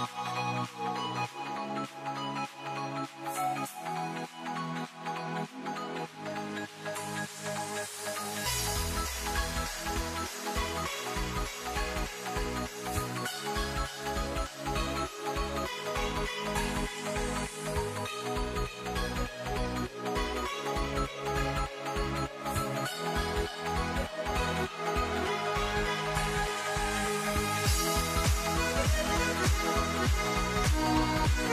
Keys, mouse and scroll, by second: 0.0 g, 3.4 s, 5.0 ctrl+r, 6.8 s, 10.3 ctrl+r, 13.6 ctrl+t, 16.9 click, 18.6 ctrl+r, 20.3 click, 22.0 ctrl+t, 23.8-24.8 scroll up 1, 24.8 scroll up 1, 25.5-27.2 middle drag, 27.2 s, 28.8-30.2 scroll down 1.